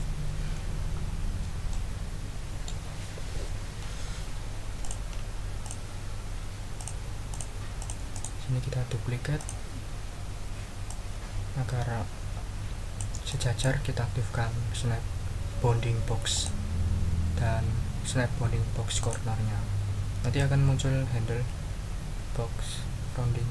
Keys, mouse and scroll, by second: 1.0 ctrl+scroll up 2, 1.7-2.8 ctrl+middle drag, 4.8 click, 5.6 click, 6.8 click, 7.3 click, 7.8 click, 8.1 right click, 9.4 click, 10.8-13.1 drag, 13.3 click, 16.3 click, 19.0 click, 20.3-23.5 drag.